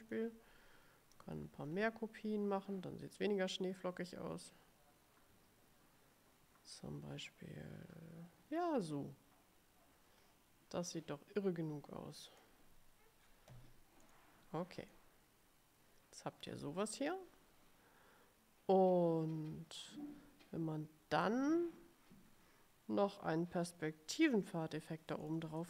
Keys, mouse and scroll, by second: 1.2 click, 1.8-2.1 scroll up 1, 3.6-12.7 drag, 14.2 click, 15.0-17.4 drag, 25.4 click.